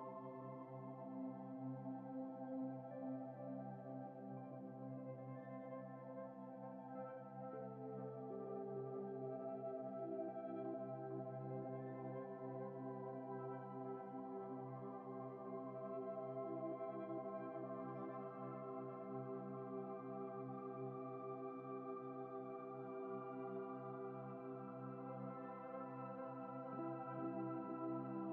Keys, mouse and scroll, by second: 5.6 ctrl+a, 7.8 ctrl+v, 9.0 alt+shift+click, 11.1 shift+click, 13.9 ctrl+space, 14.0 ctrl+click, 14.2 ctrl+space, 14.6 ctrl+click, 15.3 Return, 17.1 double click, 18.7 ctrl+0, 22.4 alt+Tab, 23.1 Return, 23.7 typing.